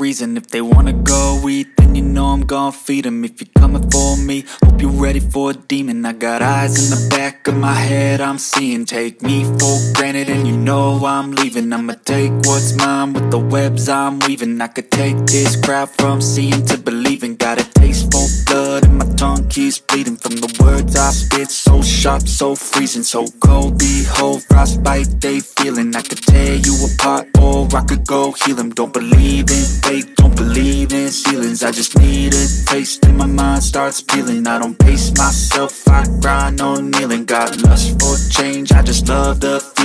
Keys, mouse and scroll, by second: 1.0 s, 2.3-2.6 scroll down 1, 2.6-3.0 scroll up 7, 3.2-3.8 scroll down 2, 3.8 s, 5.1 click, 5.5-6.0 scroll up 1, 6.0-7.5 scroll down 1, 7.5 shift+a, 9.5 g, 11.8 s, 14.5 g, 15.6 click, 16.0-16.3 scroll up 2, 16.3-16.9 scroll down 2, 16.9 scroll up 2, 17.1-17.5 shift+middle drag, 17.8-18.4 shift+middle drag, 18.4 click, 18.6-19.3 right drag, 19.3 click, 19.7 click, 20.2-21.2 scroll down 6, 21.2-23.0 shift+middle drag, 23.0 click, 24.6 shift+d, 27.4 scroll up 1, 27.7-28.1 shift+middle drag, 28.1-28.4 scroll up 1, 28.4-29.6 shift+middle drag, 29.6 s, 31.5 Tab, 31.7-32.1 scroll up 1, 32.1 ctrl+z, 33.0 click, 33.9 click, 35.1 Delete, 36.3 scroll up 1, 36.5-36.9 scroll down 3, 36.9 click, 37.5 scroll up 2, 37.7 click, 38.2 s, 39.6 g.